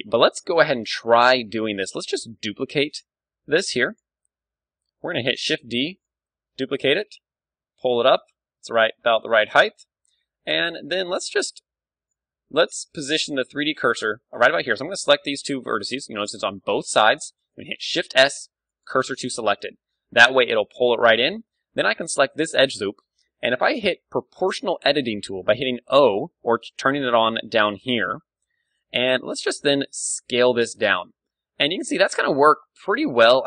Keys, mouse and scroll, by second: 0.6 z, 1.0 b, 1.4 click, 5.3 shift+d, 6.0-7.8 drag, 6.2-8.5 middle drag, 6.7 g, 8.7-10.6 drag, 8.8 z, 9.3 a, 10.6-12.6 middle drag, 10.8 z, 11.1 b, 13.1 b, 13.1 a, 16.0-18.0 middle drag, 17.7 shift+s, 19.0 KP_1, 19.7-22.4 middle drag, 20.1 z, 21.5 a, 22.4 click, 22.8 middle click, 23.3-24.8 right drag, 24.8 o, 26.6-28.4 drag, 29.5 s.